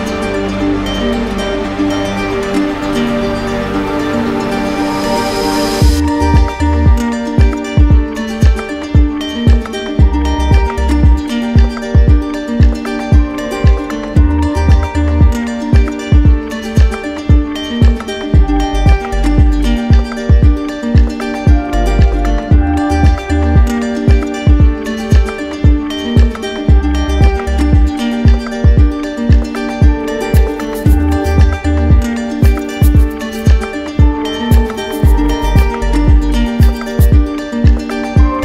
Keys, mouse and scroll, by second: 1.5 q, 2.8 click, 4.3 click, 5.3 click, 6.8 ctrl+d, 9.5 ctrl+z, 10.8 click, 11.5 shift+click, 13.0 alt+click, 13.8 w, 14.8 click, 16.4 click, 27.2 click, 28.2 click, 28.9 click, 31.8 click, 32.5 click.